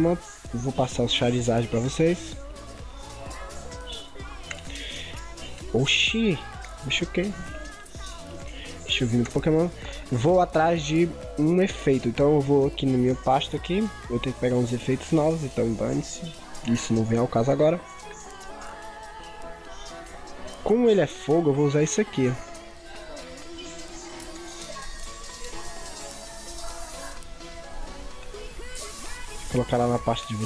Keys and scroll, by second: 1.1 ctrl+c, 4.0 ctrl+v.